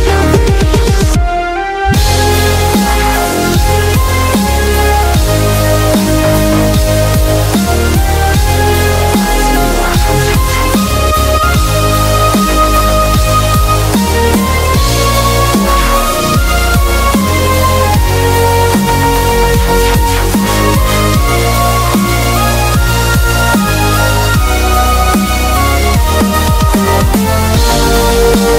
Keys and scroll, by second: 0.1 super+t, 1.3 Return, 4.5 super+[, 7.1 super+-, 7.2 super+-, 7.6 super+-, 13.9-16.8 typing, 18.2 super+z, 22.6-25.1 typing, 26.4 [, 28.1-28.5 typing.